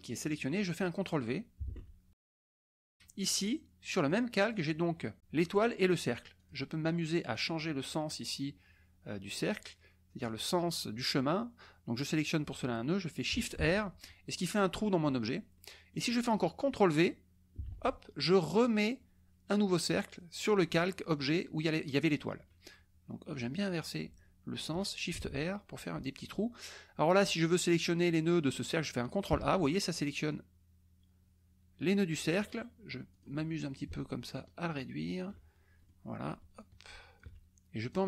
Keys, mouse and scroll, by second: 1.7 ctrl+v, 4.1 click, 6.3 click, 7.4 click, 13.5 shift+r, 15.5 click, 17.6 ctrl+v, 21.7 click, 23.3 click, 25.1 shift+r, 29.4 ctrl+a, 30.3-32.2 drag, 33.1 click, 34.3-35.4 ctrl+shift+drag, 35.8 ctrl+shift+middle click, 35.9 click, 36.6 ctrl+shift+click, 37.9 click.